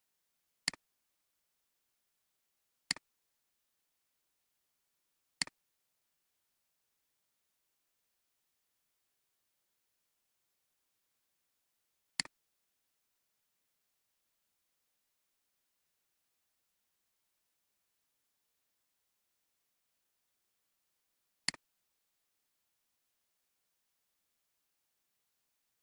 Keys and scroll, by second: 15.1-16.1 typing.